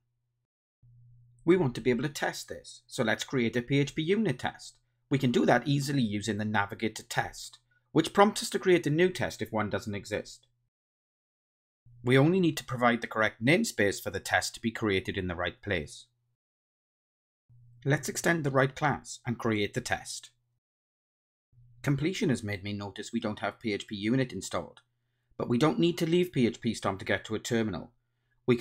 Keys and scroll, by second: 2.6 ctrl+shift+super+t, 10.7 super+a, 13.9 Return, 16.7 ctrl+alt+shift+Right, 17.4 Return, 18.5 Tab, 28.3 ctrl+Tab.